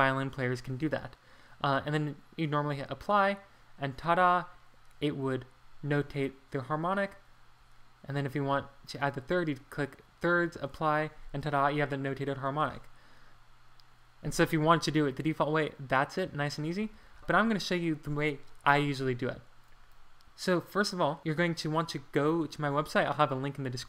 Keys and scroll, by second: 16.9 super+z, 17.1 super+z.